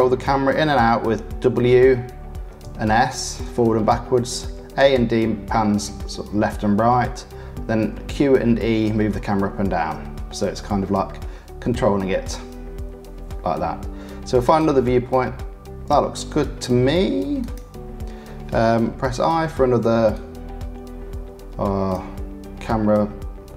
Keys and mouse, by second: 19.0 i.